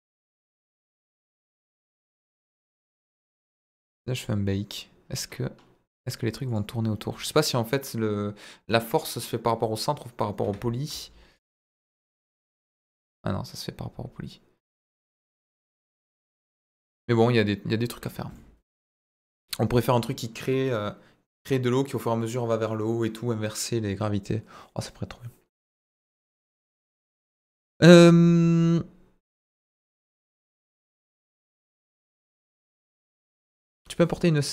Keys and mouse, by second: 1.7 click, 2.2 i, 4.1 click, 6.1 click, 6.5-10.5 drag, 11.3-18.0 drag, 18.3-19.9 middle drag.